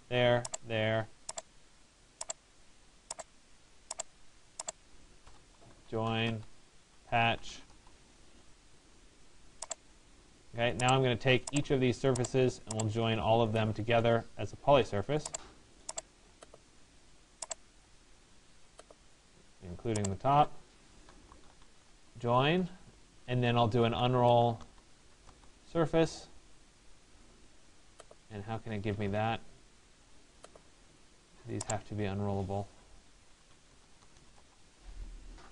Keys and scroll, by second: 4.9 Return, 21.5 Return, 34.0 Return.